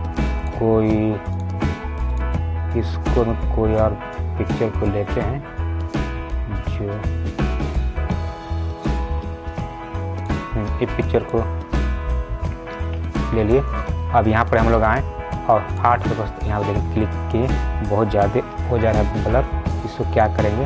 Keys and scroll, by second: 18.8 ctrl+z.